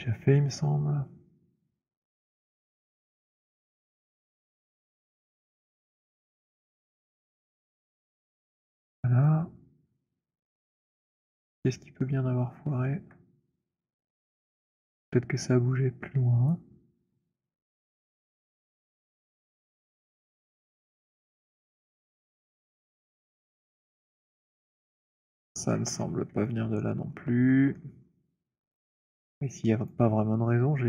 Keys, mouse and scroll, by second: 2.2 right click, 3.2 click, 4.5-7.1 c, 7.8 middle click, 7.8 c, 8.3 middle click, 8.6 alt+middle click, 8.9 alt+middle click, 9.3 alt+middle click, 9.8 middle click, 10.2 alt+middle click, 11.0 alt+middle click, 11.3 alt+click, 12.2 alt+middle click, 12.6 alt+middle click, 13.0-13.9 alt+scroll, 13.9 click, 16.3 right click, 17.0-18.0 scroll, 18.7 alt+middle click, 19.9 alt+middle click, 20.3-21.3 alt+scroll, 21.3 click, 22.6-25.1 c, 25.3 c, 25.4 middle click, 25.4 c, 25.6-26.2 scroll, 26.8 alt+middle click, 27.4 alt+middle click, 27.8 alt+middle click, 28.3 alt+middle click, 29.8 click.